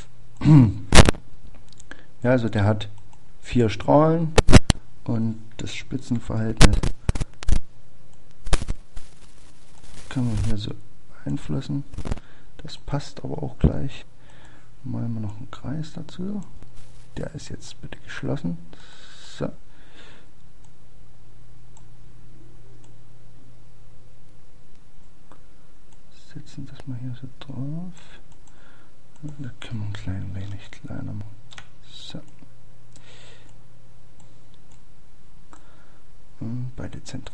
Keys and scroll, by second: 21.2 +.